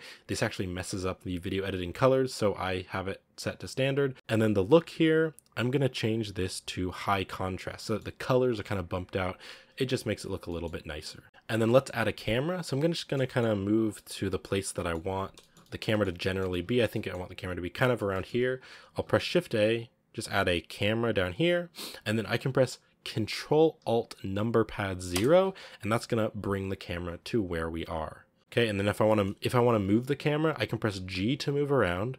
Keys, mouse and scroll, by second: 7.7-10.0 middle drag, 10.0-10.4 scroll up 1, 10.4 middle click, 11.2 z, 12.3-12.8 scroll up 2, 12.8-13.5 middle drag, 13.5 scroll down 1, 13.8-15.0 shift+middle drag, 15.0 scroll down 1, 15.3-16.0 shift+middle drag, 16.0 scroll up 2, 16.1-17.3 shift+middle drag, 17.3-18.0 scroll down 1, 18.0-21.2 shift+middle drag, 21.2 shift+a, 25.0 ctrl+alt+KP_0, 27.5-28.2 scroll up 1, 28.2 scroll down 1, 28.3 shift+middle click, 28.4 g, 30.8 g.